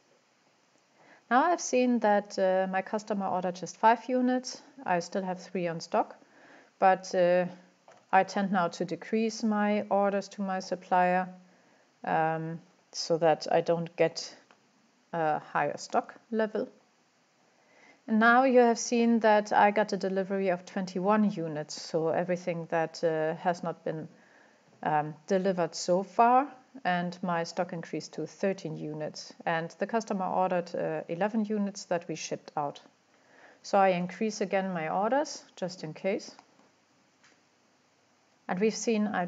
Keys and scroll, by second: 7.9 typing, 33.6-33.9 typing.